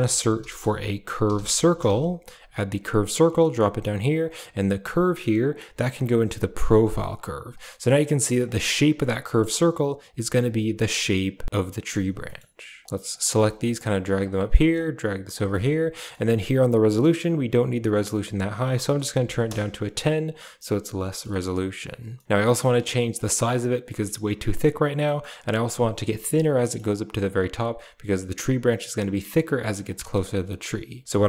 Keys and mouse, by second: 4.1 click, 5.3-6.5 drag, 8.3 click, 9.1 middle click, 10.9-11.8 middle drag, 12.1 middle click, 12.8 middle click, 12.8 click, 13.1 g, 13.9 a, 14.1 click, 14.6 click, 15.3 middle click, 15.3 a, 15.8 middle click, 18.3-19.3 drag, 20.9 middle click, 22.0 middle click, 22.3 middle click, 23.0 drag, 24.0 middle click, 24.9 middle click, 26.4 middle click, 27.0 click, 29.8 middle click, 31.0 shift+a.